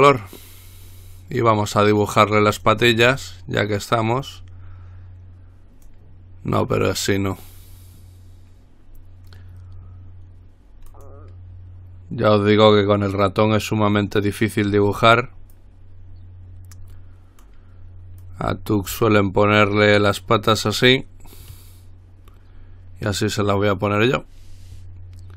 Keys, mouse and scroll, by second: 2.8 click, 4.5-6.6 drag, 11.1 click, 14.1 click, 15.7-18.1 drag, 18.4-21.1 drag.